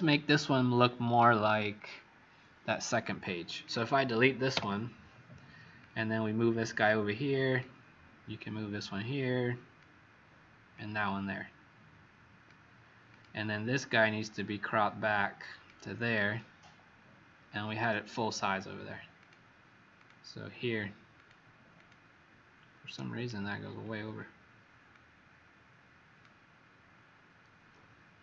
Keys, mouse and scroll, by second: 3.5 click, 4.5 Delete, 5.7 click, 21.7 click, 23.3-23.6 alt+scroll down 2, 24.9 click.